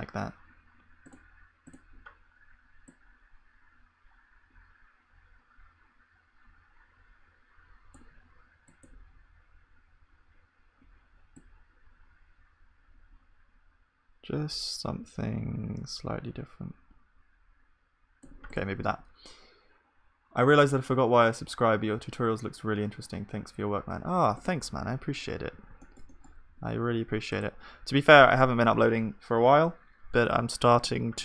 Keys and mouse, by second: 2.2-3.7 drag, 18.9 ctrl+s, 18.9-20.5 drag, 23.1-28.7 middle drag, 25.4 ctrl+s, 25.4-26.4 drag, 26.5 KP_1, 28.7 click.